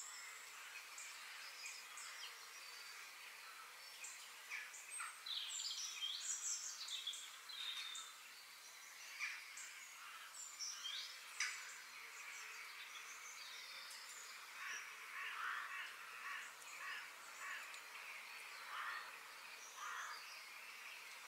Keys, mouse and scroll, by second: 1.5-3.3 middle drag, 10.5 middle click, 11.9 f, 13.3-15.2 middle drag, 15.8-17.7 middle drag, 20.4-21.2 middle drag.